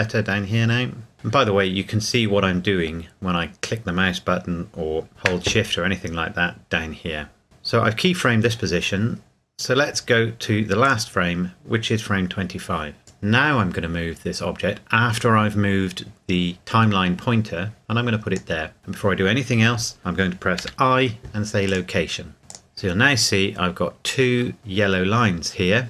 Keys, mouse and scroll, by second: 0.6 scroll up 1, 1.1-1.6 scroll down 1, 5.1 shift+Num_Lock, 5.1-7.2 scroll down 2, 10.8 click, 13.2 click, 21.6 click, 25.0 scroll down 1.